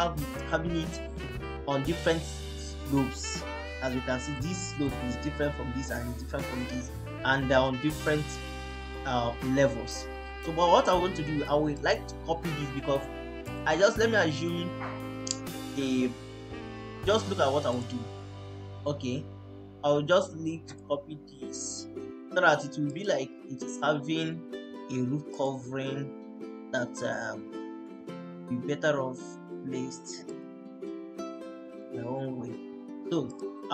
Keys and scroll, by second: 27.7 Escape.